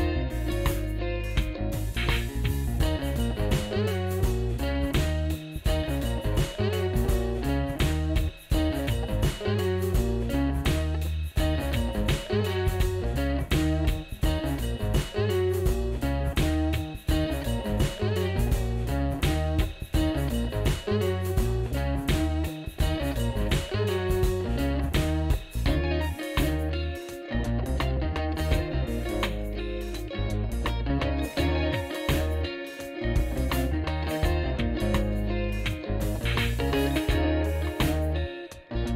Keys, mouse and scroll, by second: 0.6 shift+s, 3.2 shift+s, 4.9 shift+s, 7.4 shift+s, 8.5 shift+s, 10.4 shift+s, 11.9 shift+s, 13.5 shift+s, 14.7 shift+s, 17.7 shift+s, 19.2 shift+s, 23.2 shift+s, 24.2 shift+s, 25.7 shift+s, 26.6 shift+s, 27.2 shift+s, 31.1 shift+s, 32.8 shift+s, 33.8 shift+s.